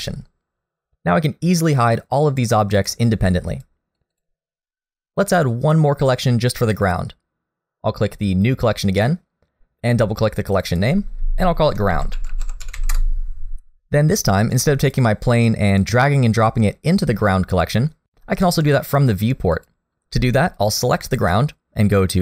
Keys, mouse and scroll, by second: 2.8 click, 3.5 click, 4.0 click, 4.1 click, 8.7 click, 10.5 click, 10.7 click, 14.8 click, 15.8 click, 19.5 click, 21.9 click.